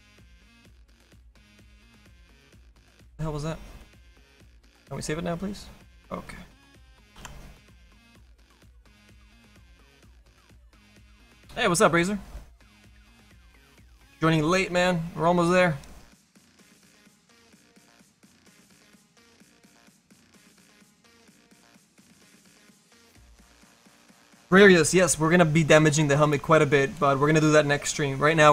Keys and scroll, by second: 2.0 Caps_Lock.